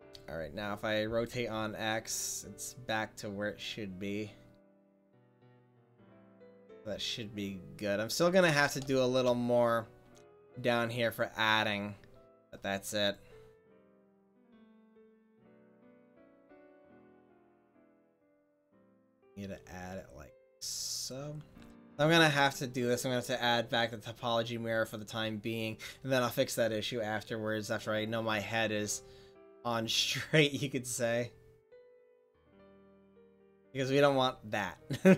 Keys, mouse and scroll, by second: 1.1 r, 8.3 click, 9.2 middle click, 9.5 click, 9.6 middle click, 12.8-14.0 drag, 15.3 f, 17.0 f, 22.0 ctrl+z, 24.9-32.5 drag, 32.8 middle drag, 34.6 middle click.